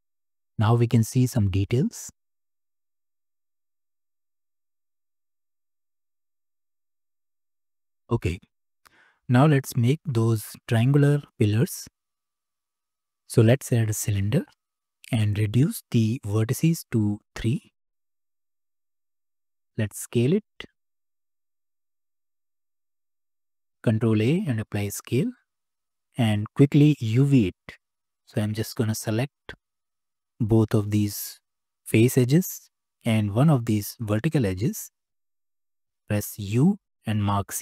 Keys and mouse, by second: 2.4-5.2 drag, 5.7 click, 6.3-7.7 drag, 17.3 click, 19.9 s, 21.7 s, 23.6 s, 23.9 ctrl+a, 25.8 Tab, 27.6 2, 28.8 click, 29.3 shift+click, 29.6 shift+middle click, 30.8 shift+middle click, 32.6 shift+click, 33.4 click, 36.6 u.